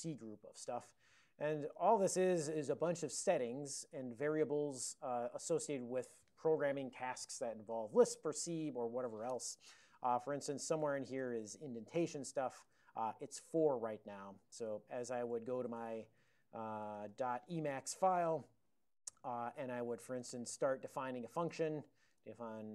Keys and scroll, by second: 1.6 ctrl+x, 1.8 b, 2.1 Return, 2.8 ctrl+n, 3.3 ctrl+n, 3.5 ctrl+n, 10.9 ctrl+s, 11.0-12.6 typing, 12.7 ctrl+e, 14.5 ctrl+x, 14.8 3, 15.9 alt+o, 16.4 ctrl+x, 16.7-17.7 typing, 18.0 alt+<, 18.6 ctrl+n, 18.8 ctrl+n, 19.0 ctrl+n, 19.9 ctrl+o, 21.6 ctrl+o.